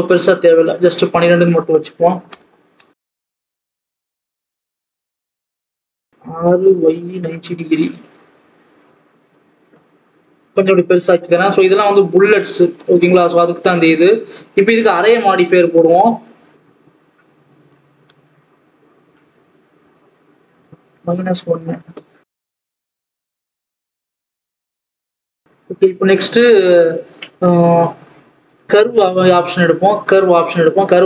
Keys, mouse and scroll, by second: 2.2-3.4 drag, 3.4 Tab, 3.6 s, 4.8 click, 5.0 scroll up 2, 5.2 s, 6.2 r, 8.3 s, 9.5 s, 11.8 scroll up 1, 12.1 Tab, 12.3-13.4 scroll down 4, 13.4-14.7 scroll up 2, 15.8-25.1 drag, 25.1 scroll down 1, 30.0-31.0 drag.